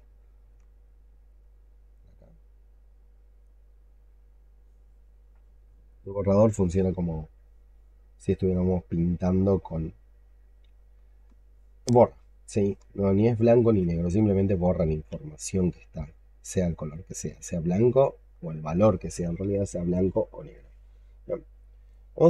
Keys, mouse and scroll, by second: 2.0 double click, 7.4 alt+right click, 8.9 double click, 10.0 alt+click, 11.0 alt+right click, 12.0 alt+middle click, 13.3 alt+click, 14.0 shift+right click, 15.9 double click, 16.2 double click, 16.6 double click, 16.8 double click, 17.3 alt+click, 20.3-21.6 scroll down 11, 21.6 scroll down 1, 21.8 alt+click.